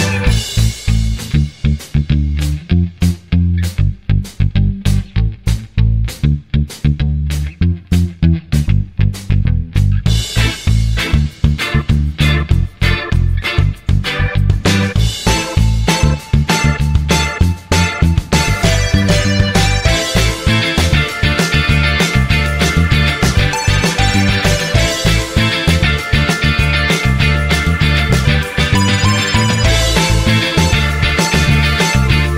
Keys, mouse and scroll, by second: 0.0-0.6 typing, 7.9 typing, 13.1 0.